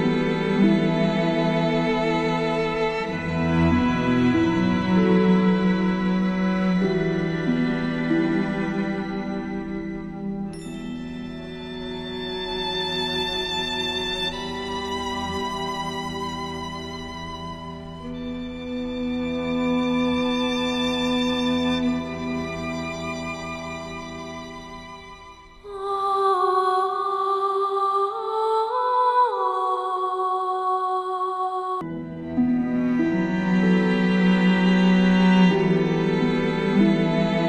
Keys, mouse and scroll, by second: 4.3-6.1 alt+scroll up 2, 6.1-6.6 alt+scroll up 1, 6.8 click, 13.9 click, 18.3-18.9 alt+scroll down 2, 19.2 click, 20.5 click, 21.4-22.0 alt+scroll up 1, 22.3 click, 22.8-23.3 alt+scroll up 2, 23.3-25.3 drag, 24.1-24.6 drag, 25.5 alt+scroll down 1, 25.7-27.6 typing, 25.8 click, 26.5 click, 26.9 click, 27.4 click, 27.7 click, 29.3-29.7 click, 30.6-32.1 typing, 30.6 click, 30.9 click, 31.2 click, 31.4 click, 31.9 click, 32.8 click, 33.4 space, 33.6-34.3 click, 33.6 space, 33.6 click, 34.9 click, 35.0 space, 35.5 click, 36.3 click.